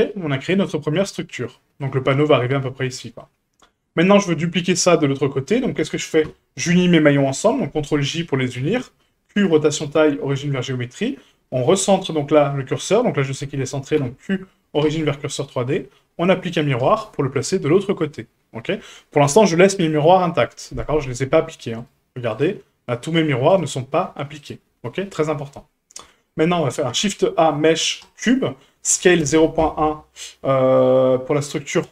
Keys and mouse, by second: 0.5 middle drag, 1.0-1.3 shift+middle drag, 1.5 middle drag, 3.0 shift+middle drag, 4.1 right click, 5.4 shift+click, 6.2 ctrl+j, 8.5 q, 9.8 q, 11.0 shift+middle drag, 14.0 q, 15.8-16.8 drag, 17.6 shift+middle drag, 21.8 right click, 22.3 right click, 23.1 right click, 23.5 right click, 26.1 shift+middle drag, 26.9 shift+a, 28.9 s.